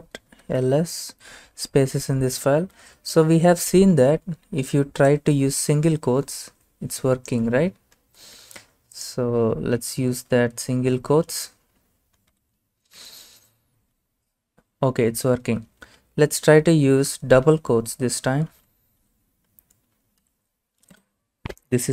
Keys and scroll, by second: 0.0-0.8 typing, 2.5-3.3 typing, 8.4 ctrl+c, 9.8 typing, 11.1 ctrl+v, 12.3-13.0 typing, 13.0 Return, 15.5-17.5 typing, 18.6 ctrl+v, 20.0-20.8 typing, 21.0 Return.